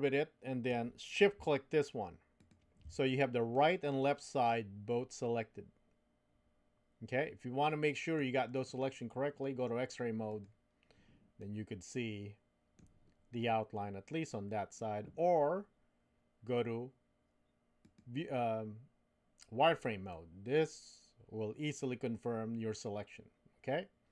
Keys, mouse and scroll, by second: 3.5-8.2 middle drag, 10.3 click, 11.4-12.8 middle drag, 20.1-24.1 middle drag.